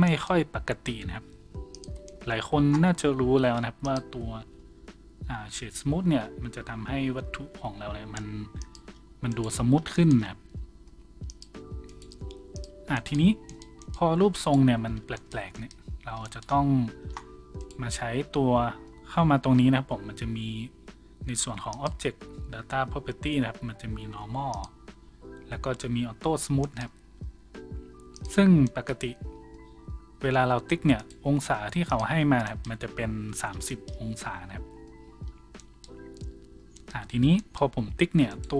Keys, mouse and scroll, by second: 1.2 w, 9.3-24.1 drag, 9.3 middle click, 9.3 right click, 10.4 w, 11.9 middle click, 11.9 right click, 13.0 w, 13.2 a, 14.4 middle click, 14.4 right click, 15.0 a, 17.6 right click, 24.1-26.4 middle drag, 26.4 shift+click, 26.6-28.7 shift+right drag, 28.7-38.5 middle drag, 35.3 Tab, 36.6 Tab, 36.6 a, 38.3 click.